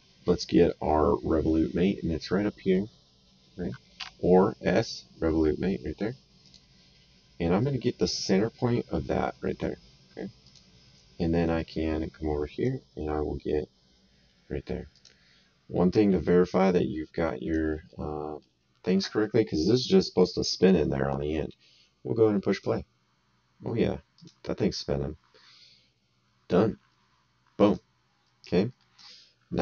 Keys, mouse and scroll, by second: 0.7 middle click, 3.9 s, 6.4 click, 7.6 right click, 10.4 click, 11.5 right click, 14.9 click, 16.6 right click, 17.8 middle click, 22.5 click, 24.1 click, 27.6 click, 28.8 middle click.